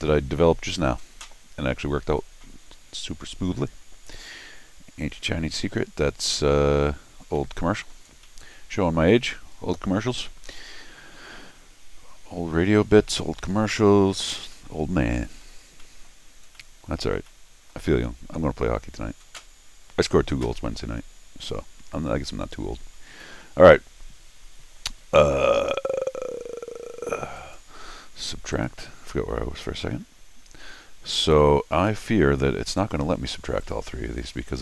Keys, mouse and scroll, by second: 0.0 middle click, 7.4 middle click, 8.1 scroll down 1, 8.2 middle click, 9.1 middle click, 9.6 scroll down 1, 14.5 middle click, 15.7 scroll down 1, 15.8 middle click, 16.5 middle click, 17.2 scroll down 1, 17.3 middle click, 18.1 scroll up 1, 23.2 scroll down 2, 27.4 click, 28.5 click, 31.2 click, 32.8 click, 33.6 click.